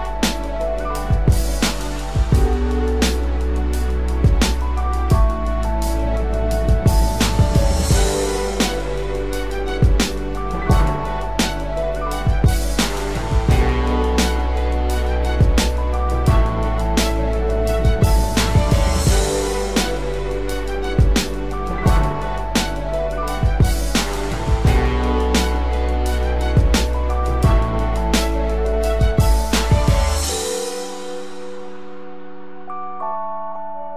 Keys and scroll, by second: 8.9 ctrl+-, 14.5 ctrl+=.